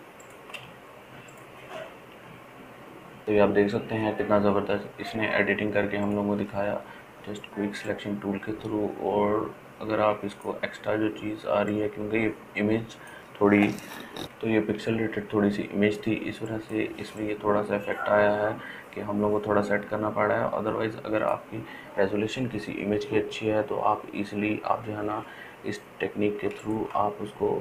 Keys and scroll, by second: 0.6 ctrl+space, 1.2 ctrl+space, 1.4 ctrl+space, 1.5 ctrl+space, 14.2 ], 16.0 ], 16.4 ].